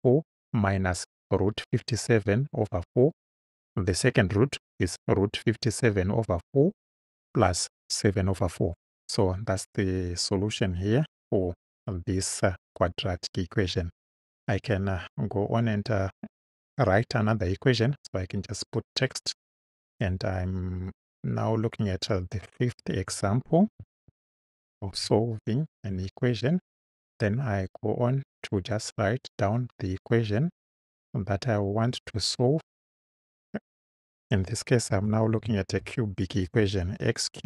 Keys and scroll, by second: 23.7 5, 24.1 ., 25.0 space, 34.9 x, 35.5 shift+x, 35.7 shift+6, 36.5 shift+3.